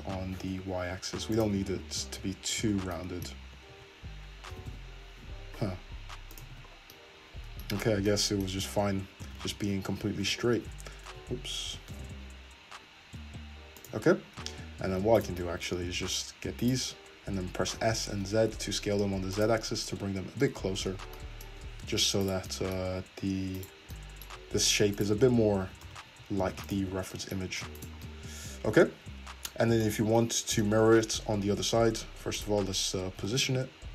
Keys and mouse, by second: 1.5 Tab, 2.7 Tab, 3.4 Tab, 3.7 Tab, 4.5 g, 5.3-6.4 shift+drag, 6.5 Tab, 7.8 Tab, 9.2 ctrl+z, 9.7 ctrl+z, 10.1-15.2 middle drag, 10.2 g, 15.2 right click, 15.4 middle click, 16.6 shift+click, 17.7 s, 19.7 Tab, 20.9 Tab, 20.9-22.2 middle drag, 22.2 click, 22.3-23.6 middle drag, 23.6 click, 23.7-25.0 middle drag, 25.0 shift+click, 25.1-27.8 shift+middle drag, 25.7 s, 26.9 Tab, 27.8 click, 28.0-31.5 middle drag, 31.5 `, 33.2 g.